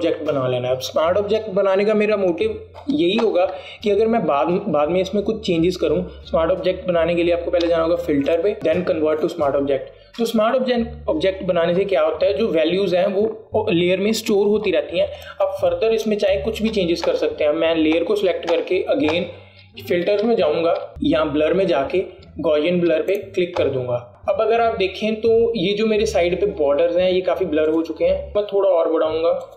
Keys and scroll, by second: 16.2 alt+space.